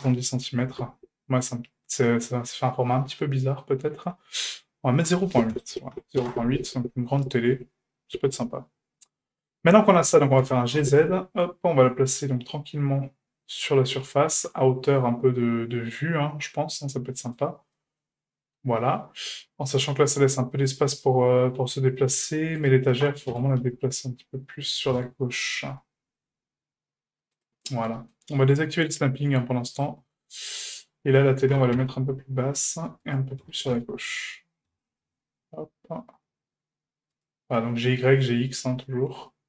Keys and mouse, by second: 2.2-2.9 middle drag, 3.1-3.6 shift+middle drag, 4.9-7.2 drag, 10.4 g, 17.7-18.6 shift+middle drag, 19.2-20.0 middle drag, 22.6 right click, 23.3 g, 28.0 shift+middle click, 29.8 drag, 30.4 shift+middle click, 30.8 right click, 31.5 g, 33.4 g, 37.8-38.1 middle drag, 38.3 shift+middle drag.